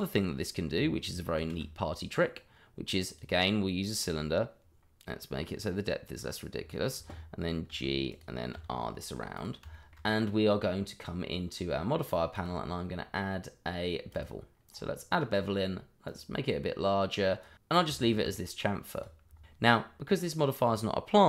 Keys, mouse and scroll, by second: 1.4 shift+a, 3.1 click, 5.6 click, 6.8 click, 7.7 g, 8.1 click, 8.5 r, 9.3 click, 9.7 shift+middle click, 10.8 middle click, 12.3 click, 14.7-15.8 scroll up 1, 16.0 click, 17.8 middle click, 19.3 click, 19.3 middle click, 19.4 shift+middle click.